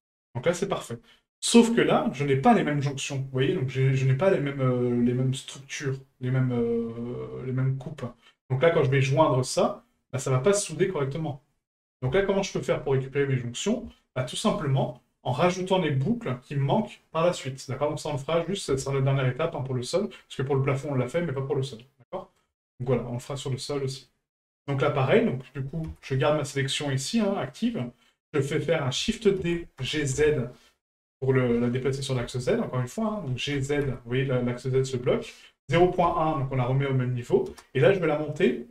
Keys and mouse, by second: 1.8-2.1 middle drag, 8.9-9.3 middle drag, 12.3 shift+middle drag, 14.0 shift+middle drag, 20.2-20.6 middle drag, 21.2 middle drag, 22.1 middle drag, 22.7 shift+middle drag, 23.2 middle drag, 24.1-24.5 middle drag, 26.2-26.6 middle drag, 27.5 middle click, 32.9 middle click.